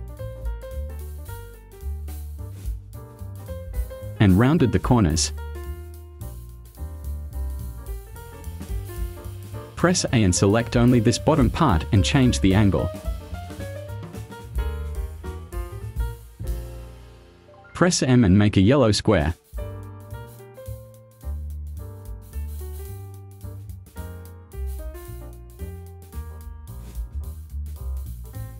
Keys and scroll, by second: 9.6 a, 16.1 v, 17.0 space, 17.5 m.